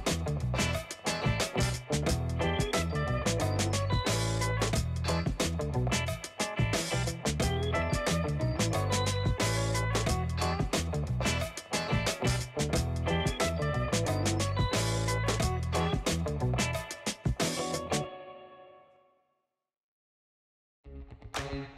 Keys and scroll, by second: 1.0 typing, 2.1 typing, 2.4 Return, 8.6 7, 9.0 Return, 14.7 space, 16.7-17.3 space.